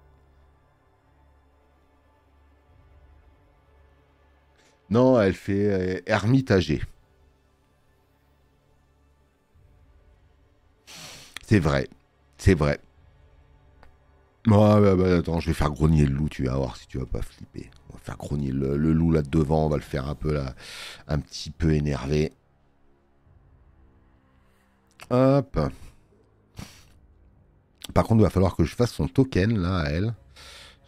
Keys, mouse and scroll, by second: 12.6 space, 12.8 click, 16.9 space, 17.1 click, 19.9 space, 19.9 click, 26.3 click, 26.3 space, 27.7 alt+scroll up 2, 28.0 alt+scroll down 2.